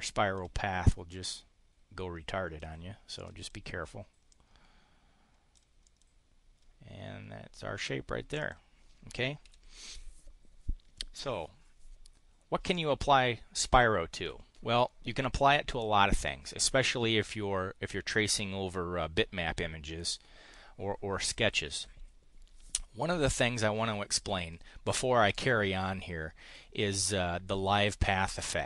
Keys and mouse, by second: 1.2-2.6 drag, 3.1 click, 3.4 click, 4.3-5.6 drag, 5.8 click, 8.4 click, 9.4 Delete.